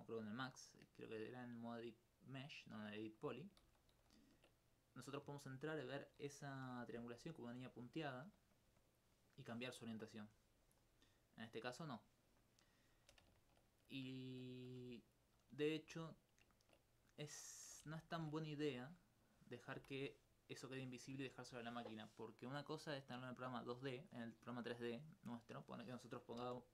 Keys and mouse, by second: 3.6 ctrl+z, 7.0 d, 7.2 click, 7.5 click, 7.8 click, 8.5 click, 9.5 click, 10.4 right click, 14.9 right click, 15.5 right click, 16.0 alt+click, 18.4 alt+click, 19.7 j, 25.1 middle click, 26.4 ctrl+z.